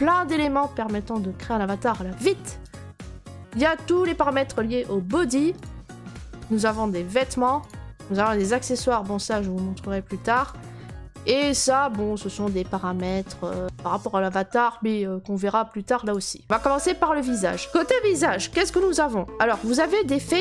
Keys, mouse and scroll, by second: 2.7 click, 6.5 scroll, 7.6 click, 10.4 click, 16.1 click, 16.8-19.2 scroll, 19.2-19.9 scroll.